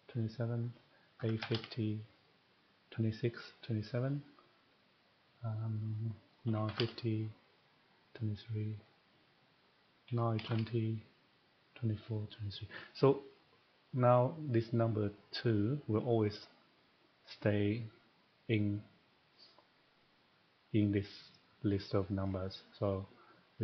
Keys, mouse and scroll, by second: 0.6 click, 1.0-1.7 typing, 2.4 click, 4.0 click, 5.8 click, 6.2-6.9 typing, 7.6 click, 8.8 click, 10.1-10.4 typing, 11.3 click, 13.9 click, 18.7 click, 21.0 click, 22.2 click.